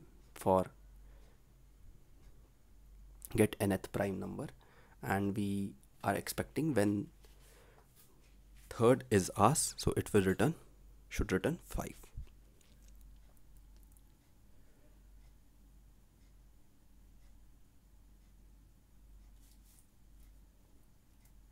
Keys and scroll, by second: 4.1 ctrl+g, 5.5 ctrl+v.